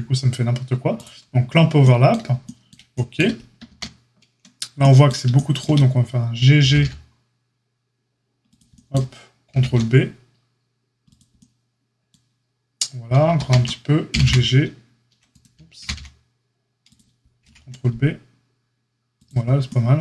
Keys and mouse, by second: 0.9-2.2 drag, 2.2-13.1 shift+middle drag, 3.6 ctrl+z, 6.6 g, 9.4 ctrl+b, 13.1 ctrl+click, 13.3 ctrl+z, 13.3-20.0 middle drag, 14.0 g, 15.7 g, 17.4 ctrl+b.